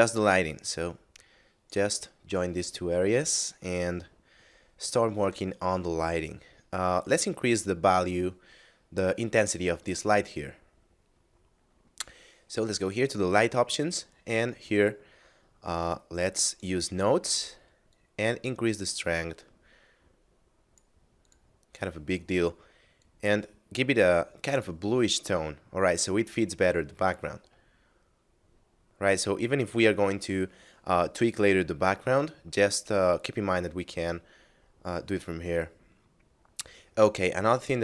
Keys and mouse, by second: 0.9 click, 2.9 middle click, 3.9 shift+middle click, 5.5 middle click, 6.9 right click, 8.9 middle click, 12.9 click, 16.3 click, 21.3 click, 27.7 middle click, 35.1 middle click.